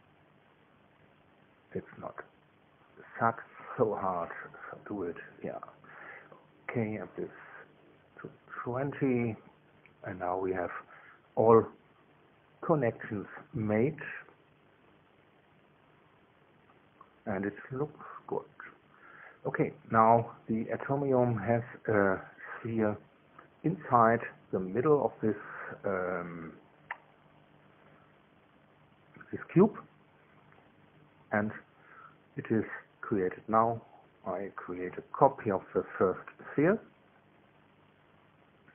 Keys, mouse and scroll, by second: 1.0 click, 2.0 click, 2.4 Caps_Lock, 3.7 click, 4.8 KP_2, 5.0 KP_0, 5.3 KP_Enter, 7.0-8.3 drag, 9.1 BackSpace, 10.0 Return, 13.1 click, 13.5 middle click, 15.7 shift+click, 16.6 space, 17.3 click, 18.1 a, 19.1 click, 19.6-22.5 drag, 25.0 2, 38.0 click.